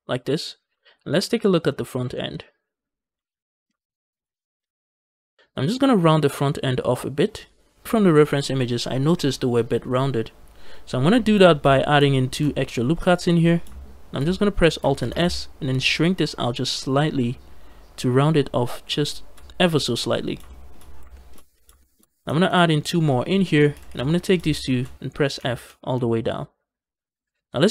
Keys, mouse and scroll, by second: 0.4 scroll down 2, 0.7 shift+middle click, 1.0-1.9 scroll up 4, 1.4 shift+middle click, 2.0 shift+middle click, 2.2-3.0 scroll up 2, 3.2 shift+middle click, 3.9 scroll down 3, 4.2 shift+middle click, 4.4 shift+click, 4.7 shift+click, 5.4 ctrl+z, 10.9-11.6 scroll up 3, 11.3 shift+click, 11.3 shift+middle click, 12.1 ctrl+r, 13.0 right click, 14.9 alt+s, 18.8 shift+click, 20.3 shift+middle click, 21.0 shift+middle click, 21.3 scroll up 1, 21.6 shift+middle click, 22.3 ctrl+r, 23.1 right click, 23.6 a, 23.7 a, 23.9 click, 24.5 shift+click, 25.2 f, 25.5 f.